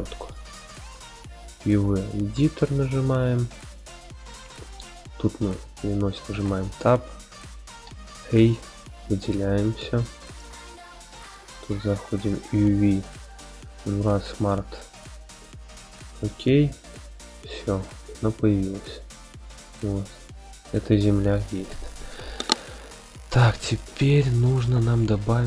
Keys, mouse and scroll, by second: 0.6-2.7 drag, 8.0 a, 9.9 scroll down 1, 10.9-11.9 scroll down 4, 11.9-16.3 drag, 19.0-19.8 scroll up 1, 19.8-20.7 middle drag, 19.8-20.3 scroll up 1.